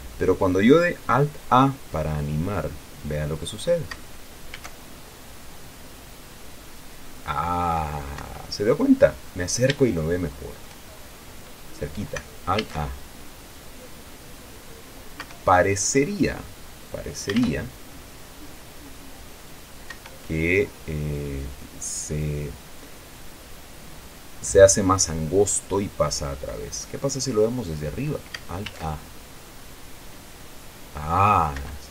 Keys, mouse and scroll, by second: 3.1 scroll down 2, 3.8 scroll down 2, 4.8 alt+a, 8.5 Escape, 9.2-9.9 scroll up 2, 9.9 scroll up 1, 10.1-11.1 shift+drag, 11.3-11.7 shift+scroll up 3, 12.9 alt+a, 15.5 Escape, 16.4-17.0 scroll down 2, 17.0-18.0 scroll down 1, 17.7 alt+a, 20.3 Escape, 25.2-28.6 drag, 29.0 alt+a.